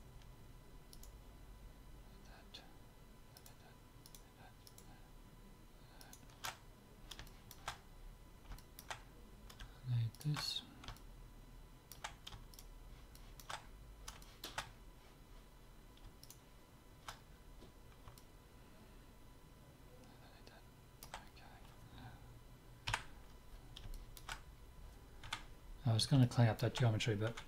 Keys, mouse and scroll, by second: 0.2-2.9 right drag, 3.4-7.9 right drag, 7.2 click, 7.9-8.9 middle drag, 10.1-11.9 middle drag, 12.5-14.5 middle drag, 16.2 click, 16.5-19.9 middle drag, 20.1 middle click, 22.9 KP_7, 23.9-27.4 middle drag, 25.2 Tab, 27.3 Tab.